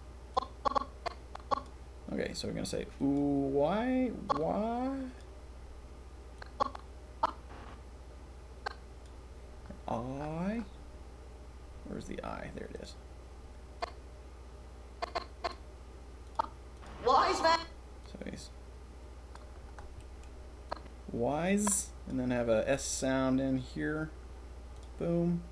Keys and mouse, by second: 0.3-1.6 drag, 4.2-5.2 drag, 6.3-9.0 drag, 13.8-14.7 drag, 15.5 middle click, 16.3-16.7 middle drag, 16.8 middle click, 17.5-18.0 middle drag, 20.2-20.6 middle drag, 21.0-22.1 drag.